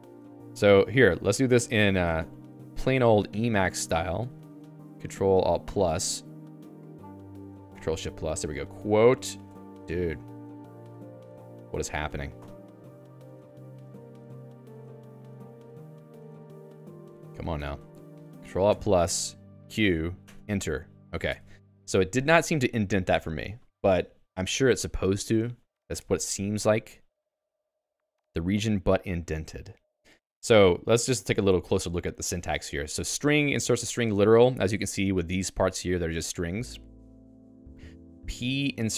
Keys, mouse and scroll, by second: 0.1 Escape, 0.6 i, 1.9 ctrl+space, 2.1 Right, 2.4 Right, 2.5 Right, 2.7-4.0 Right, 4.2 Right, 4.3 Right, 8.5-9.9 typing, 13.3 Escape, 14.3 i, 15.0 ctrl+space, 15.2-16.7 Right, 16.8 Right, 19.6 q, 20.2 Return, 21.3 Escape, 21.5 Up, 22.0 Up.